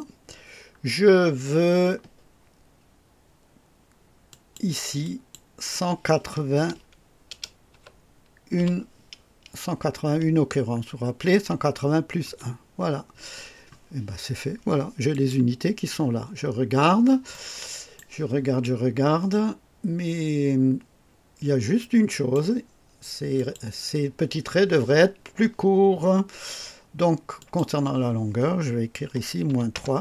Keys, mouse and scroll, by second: 0.3-0.6 scroll down 1, 4.3 click, 5.0 click, 7.3 BackSpace, 7.7 KP_8, 7.7 KP_8, 8.6 KP_1, 12.2 KP_Enter, 12.2 Return, 15.1 click, 15.9-16.7 scroll up 4, 17.3-18.1 right drag, 22.1 click, 23.3 click, 27.3 click, 29.0 -, 29.4 KP_3, 29.7 Return.